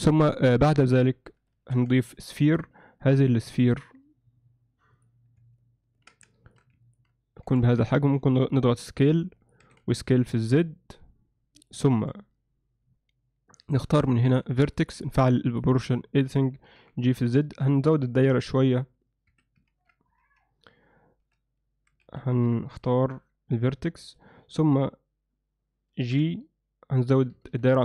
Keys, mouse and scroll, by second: 1.9 shift+a, 5.6-6.0 ctrl+alt+middle drag, 6.3 alt+shift+middle drag, 6.9 ctrl+alt+middle click, 9.6 s, 12.5 Tab, 13.5 click, 14.2 shift+middle click, 14.7 ctrl+middle click, 15.5 click, 16.0 ctrl+alt+middle click, 16.8 g, 18.4 f, 19.7 ctrl+z, 20.2 ctrl+z, 21.3 z, 22.1 alt+a, 22.9 b, 26.2 g.